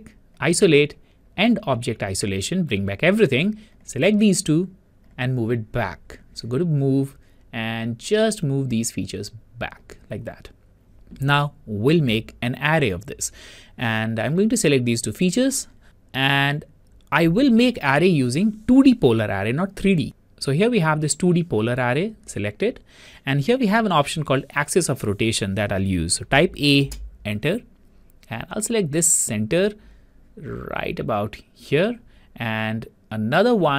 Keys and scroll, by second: 26.5 Return.